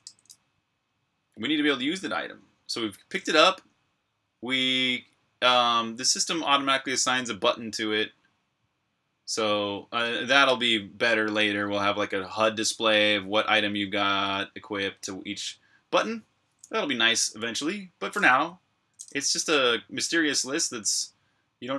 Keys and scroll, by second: 0.0-0.3 typing.